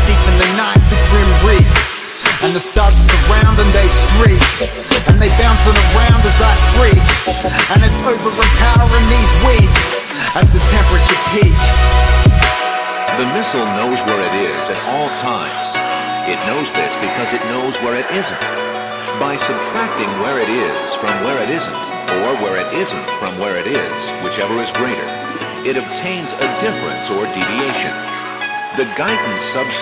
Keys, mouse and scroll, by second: 1.4 click, 4.3-5.5 typing, 6.2 click, 8.3 KP_0, 8.6 click, 9.8 click, 11.2-11.9 typing, 12.1 Return, 15.1 click, 16.0 KP_0, 16.2 Return, 17.5 click, 19.6 right click, 20.2 click, 22.8 click, 22.8 KP_5, 23.5 click, 23.7 KP_0, 24.1 Return, 24.3-29.8 drag.